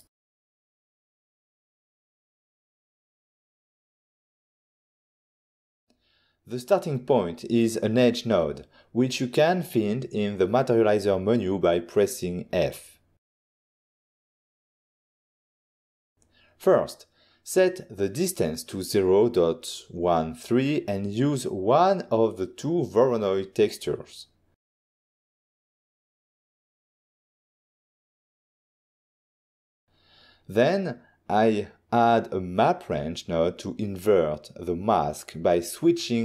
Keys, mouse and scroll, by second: 0.0 click, 0.5 click, 1.1 ctrl+middle click, 7.8 middle click, 7.8 click, 7.9 click, 8.3 f, 9.9 click, 10.5 click, 11.5 click, 14.1 click, 14.7 ctrl+shift+click, 17.6 ctrl+middle click, 19.8-20.2 ctrl+scroll up 2, 20.1 click, 21.2 ., 22.2 1, 22.8 3, 23.1 Return, 26.5 ctrl+middle click, 29.1 click, 31.1 click, 32.8 scroll up 1, 33.6 click, 34.1 click, 34.9-35.8 typing.